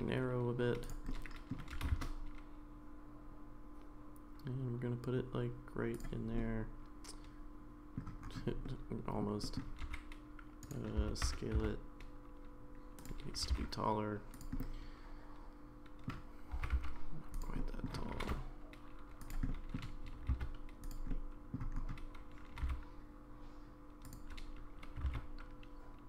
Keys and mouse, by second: 1.1 middle click, 1.7 g, 6.4-8.0 middle drag, 8.6 middle click, 9.4 middle click, 9.8 g, 11.8 s, 13.4 g, 14.6-16.1 middle drag, 17.6 middle click, 17.6 s, 18.1 g, 19.5 middle click, 20.0 g, 21.1 middle click, 22.5 g, 25.0 g.